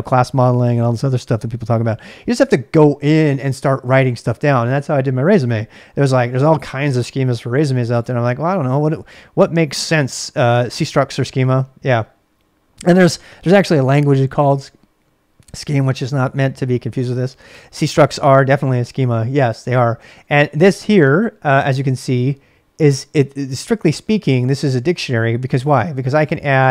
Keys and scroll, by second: 20.0-21.2 typing, 23.2 j, 23.4 j, 26.5-26.7 typing.